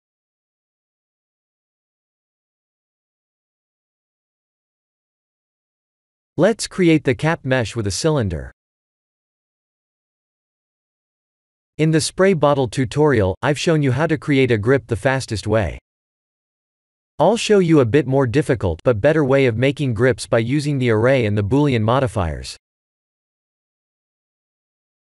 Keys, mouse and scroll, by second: 2.7 click, 3.6 Tab, 4.1 middle click, 5.7 middle click, 6.3 KP_1, 6.9-7.3 scroll down 2, 7.4 shift+a, 13.6 g, 15.3 s, 17.7 s, 19.8 shift+z, 21.8 middle click, 23.4 KP_2, 23.6 KP_1, 24.4 g.